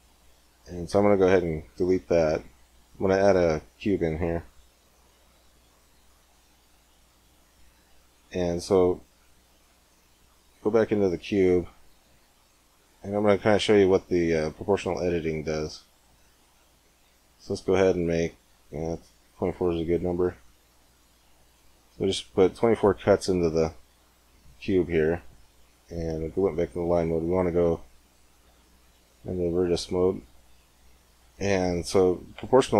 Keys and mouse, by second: 0.3 Tab, 0.8 x, 2.4 shift+a, 9.3 Tab, 10.5 middle click, 11.1 ctrl+r, 20.3 click, 20.6 middle click, 21.5 click, 22.1 middle click, 22.2 click, 22.4 middle click, 22.4-23.8 drag, 23.8-26.3 middle drag, 27.6-29.5 drag.